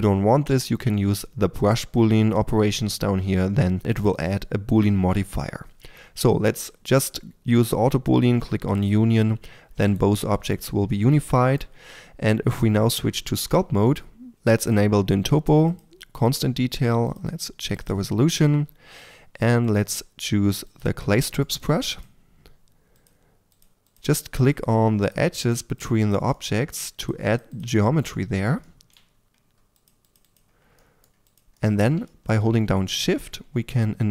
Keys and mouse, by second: 8.7-12.0 drag, 9.8-10.5 right drag, 10.1 g, 12.0 Tab, 14.3-19.0 drag, 19.6-21.1 drag, 21.1-21.6 middle drag, 21.6 f, 33.7-34.1 drag.